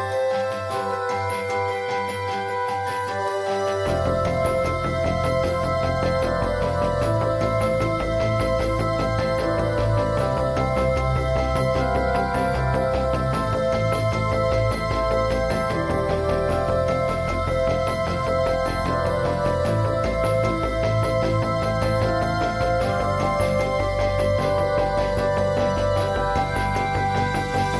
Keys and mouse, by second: 1.9 ], 2.1-3.2 drag, 2.1 ], 3.3-4.9 drag, 5.6 middle click, 6.2 l, 6.4-7.0 drag, 7.0 middle click, 7.0 drag, 7.1 middle drag, 7.4 middle drag, 7.6-10.8 drag, 10.8 middle click, 10.9 drag, 11.1 middle click, 11.4-12.6 middle drag, 13.0 middle click, 13.2 click, 13.6-14.1 middle drag, 14.1 click, 14.9 ], 15.0 ], 15.1-15.5 drag, 15.5 middle click, 16.1 l, 16.6 middle drag, 16.9-17.9 drag, 17.9 middle click, 18.5 click, 18.8-20.4 middle drag, 20.6 l, 20.9-22.3 drag, 22.3 middle drag, 22.6 click, 23.1-25.6 typing, 23.7-24.9 drag, 26.3 middle click, 26.9 middle click, 27.4 ctrl+s.